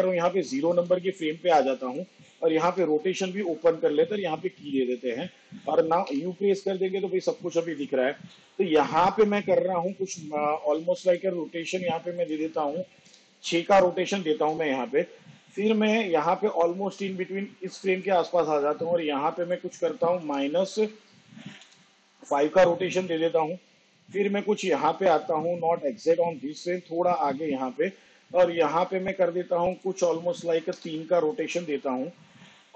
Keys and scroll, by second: 2.6 r, 5.9 u, 13.1 6, 20.5 -, 21.7 5, 30.7 3.